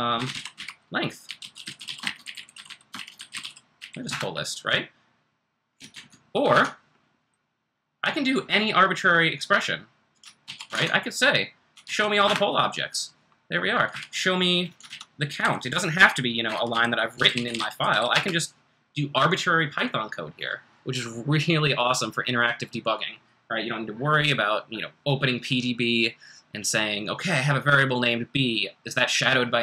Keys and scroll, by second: 0.0-4.3 typing, 5.9 super+Tab, 6.6 super+Tab, 10.4 super+c, 10.7 super+Tab, 11.8 super+v, 12.3 Return, 13.9 Up, 14.9 super+Right, 15.4-18.4 typing.